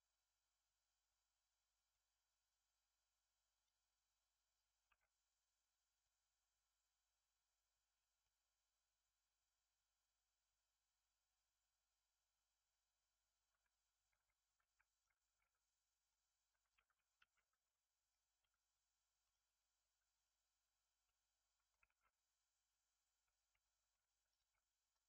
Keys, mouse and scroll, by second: 3.5-4.8 drag, 4.8 Tab, 5.9-8.1 drag, 8.1 scroll up 1, 8.1-11.2 middle drag, 14.5-15.4 middle drag, 15.4 Tab, 15.8 scroll down 4, 16.0 middle click, 16.8 3, 17.1 alt+z, 17.4 click, 18.3 x, 20.2 click, 21.0 middle click, 21.8 alt+z, 22.0-23.0 scroll up 4, 23.0-23.4 scroll up 1, 23.4 k, 24.5 middle click, 25.0 1.